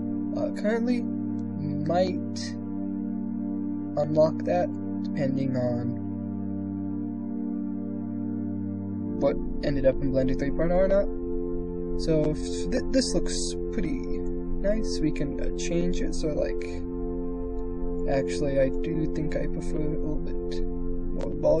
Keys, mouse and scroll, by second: 11.9 middle click, 14.1-17.8 drag, 18.4-20.4 drag.